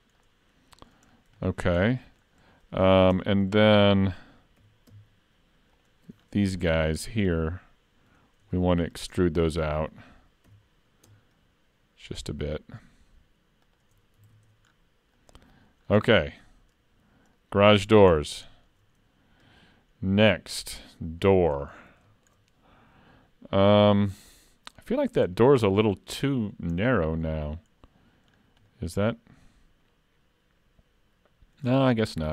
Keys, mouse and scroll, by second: 0.2 middle click, 1.1 scroll down 3, 1.4 shift+middle click, 1.8 middle click, 2.4-2.8 scroll up 3, 2.7 middle click, 3.1 Tab, 3.6 shift+middle click, 4.6 3, 5.7 alt+click, 6.2-6.9 scroll down 4, 6.9 middle click, 8.5 shift+middle click, 8.9 scroll up 4, 9.2 shift+middle click, 9.6 middle click, 10.5 e, 14.2 alt+a, 14.5 Tab, 14.7-15.8 scroll down 5, 15.2 middle click, 15.8-16.2 scroll down 2, 16.2 shift+middle click, 16.7-17.3 scroll up 5, 17.4 middle click, 18.1-18.5 scroll down 2, 18.5 shift+middle click, 21.2 scroll up 2, 21.3 middle click, 21.7-22.1 scroll up 2, 22.1 shift+middle click, 25.0 scroll up 1, 25.4 middle click, 26.8-27.8 scroll down 2, 28.3-28.7 scroll down 3, 28.7 middle click.